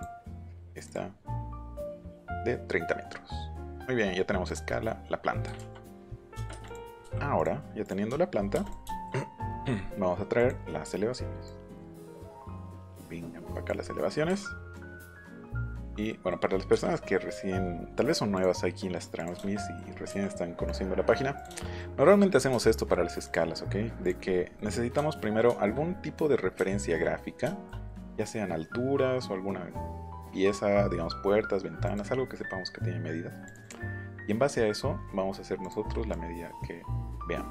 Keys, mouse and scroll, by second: 0.8 click, 2.2 click, 3.3 middle click, 4.4 click, 5.5 ctrl+z, 6.6 click, 7.3 click, 7.8 click, 8.6 click, 8.8 shift+middle click, 10.3 click, 11.4-13.6 drag, 13.8 middle click, 14.7 click, 16.1 middle click, 16.3-16.7 scroll up 1, 16.7 Escape, 17.3 click, 18.3 click, 19.2 click, 19.4 shift+middle click, 20.6 click, 21.3 click, 21.6 middle click, 22.5 shift+middle click, 23.3 click, 26.6 shift+middle click, 26.9 middle click, 27.8 middle click, 31.8 click, 33.4 click, 33.6 click, 35.6 click, 36.1-37.5 drag.